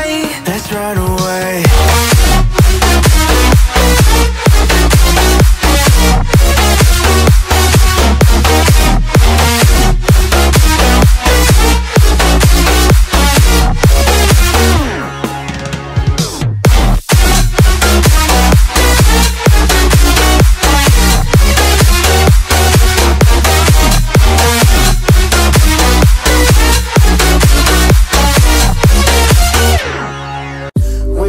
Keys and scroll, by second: 1.6 Right, 7.5 ctrl+j, 8.4 ctrl+t, 10.1 ctrl+z, 13.0 ctrl+t, 15.7 ctrl+z, 21.7 Delete, 22.6 ctrl+t, 26.0 Return, 27.3 Left, 30.6 ctrl+g.